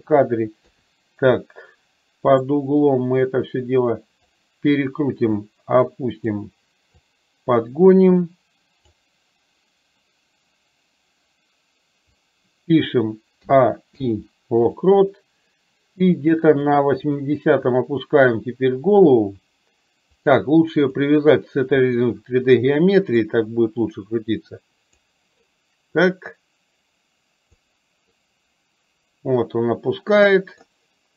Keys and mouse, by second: 0.7 KP_3, 1.4-2.6 middle drag, 3.4 click, 5.6 click, 7.1-8.9 drag, 16.7 click, 17.6 click, 20.2-22.2 drag, 23.3 click, 23.6-25.1 drag, 26.2-27.7 drag, 28.2-30.7 middle drag.